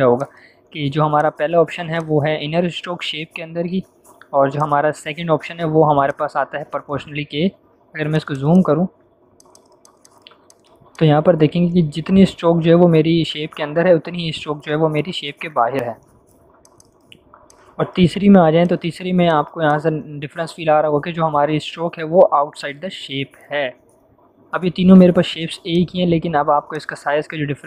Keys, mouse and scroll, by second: 4.5 click, 8.0 z, 8.0 click, 8.8 z, 9.3 click, 10.9-11.8 click, 11.3 space, 13.8 v, 15.2 ctrl+0, 16.5 z, 16.7 click, 17.3 space, 17.4-18.0 click, 18.0 v, 18.6-20.5 drag, 25.6-27.6 drag.